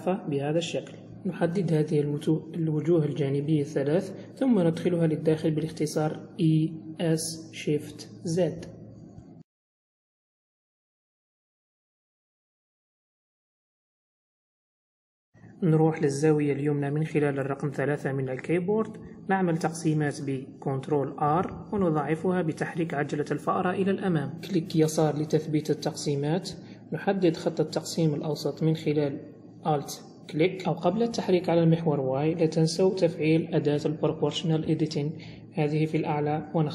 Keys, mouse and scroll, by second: 0.3 click, 0.9 shift+click, 1.3 middle click, 2.4 shift+click, 2.9 middle click, 4.7 e, 8.5 middle click, 9.6 s, 12.6 click, 13.5 g, 15.7 middle click, 18.5 KP_3, 19.1-19.9 scroll up 4, 19.9 n, 20.6-21.5 scroll up 2, 21.7 ctrl+r, 25.5 alt+click, 26.7 g, 30.0 click, 31.4 click, 32.2 click, 34.3 g.